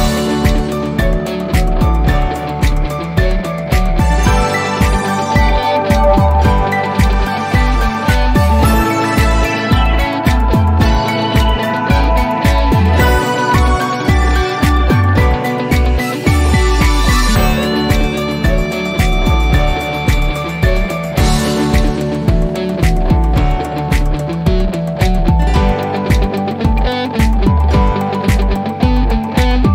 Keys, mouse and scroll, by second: 13.1 click, 18.7 F3, 21.4 click, 25.5 click, 27.6 click.